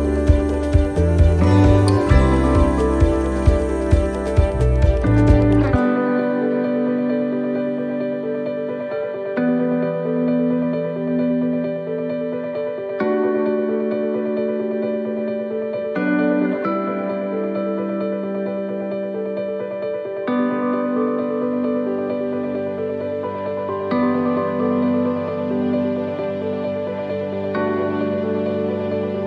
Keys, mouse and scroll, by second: 1.0 middle click, 1.9 click, 7.1 middle click, 8.1 shift+middle click, 8.6-9.1 scroll up 3, 9.0 middle click, 10.6 click, 11.9 middle click, 12.6 shift+middle click, 13.0 scroll up 1, 13.6 scroll up 2, 13.6 middle click, 14.9 right click, 15.2 middle click, 15.9-16.3 scroll down 2, 17.2 click, 17.8 click, 19.0 click, 20.0 middle click, 20.3 scroll down 2, 20.9-21.7 scroll down 5, 21.0 middle click, 21.9 shift+middle click, 23.6 click, 24.3 middle click, 25.8-26.5 scroll up 3, 26.2 middle click, 28.3-28.6 scroll up 1, 28.9 middle click.